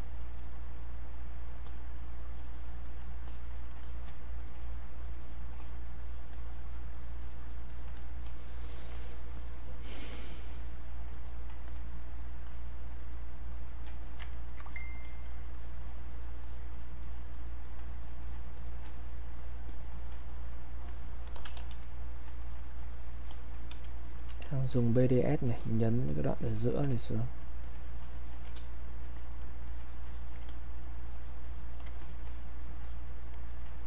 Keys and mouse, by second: 4.4 click, 5.4-7.7 drag, 8.6-11.7 alt+drag, 13.9 alt+click, 14.4 ctrl+right click, 14.7 click, 15.5 click, 21.0-22.0 typing, 22.2 alt+click, 23.8 space, 24.1 click, 24.6 alt+click, 26.3 alt+click, 27.6 alt+click, 28.5 space, 28.9 click, 29.7 alt+click, 31.0 alt+click.